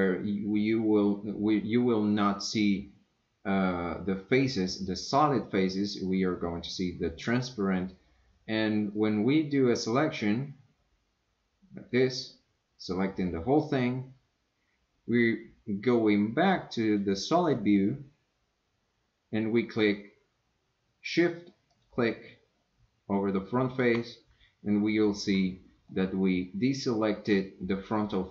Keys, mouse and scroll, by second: 3.6 click, 8.9-12.0 drag, 16.9 click, 21.7 shift+click, 25.9-27.7 middle drag.